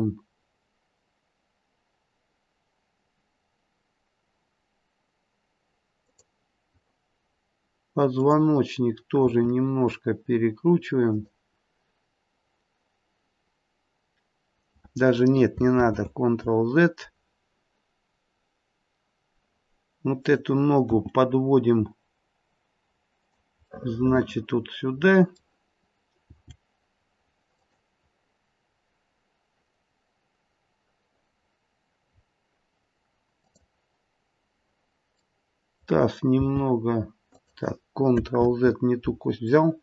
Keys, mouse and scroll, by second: 8.1 click, 9.2 r, 15.8 ctrl+z, 20.2 click, 20.8 g, 23.7 middle click, 24.5 middle click, 24.9 middle click, 26.2 g, 32.1-33.3 scroll up 3, 33.3 click, 34.2-35.2 scroll down 2, 35.2 middle click, 35.2-35.5 scroll down 1, 35.5 middle click, 36.4 g, 38.4 ctrl+z, 39.5 middle click.